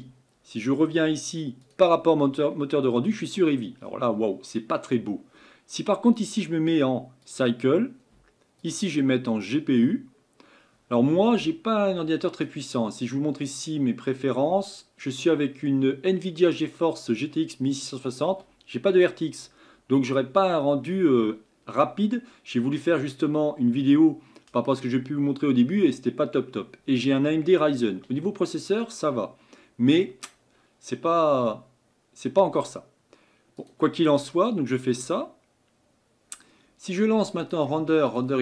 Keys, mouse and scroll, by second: 7.3-33.7 drag.